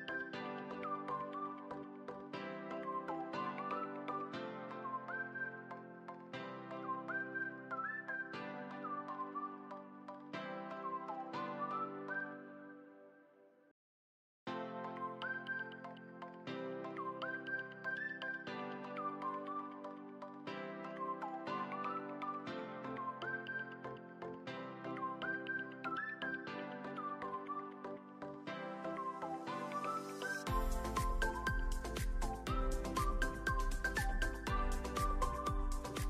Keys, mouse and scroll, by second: 0.5 click, 1.7 s, 2.3 click, 2.9 click, 3.0 click, 4.6-7.1 drag, 6.7 KP_0, 7.8 click, 8.7 ctrl+s, 9.7 shift+a, 13.0 r, 13.2 x, 13.6 9, 13.7 0, 14.0 click, 15.1 click, 15.8 s, 18.0 click, 18.7 click, 19.0 drag, 23.4 click, 24.5 click, 26.1-26.7 alt+middle drag, 27.6 click, 28.6 s, 29.8 alt+middle click, 30.5 click, 31.7-32.1 alt+middle drag, 33.3 click, 34.6 s, 35.0 z, 35.5 click.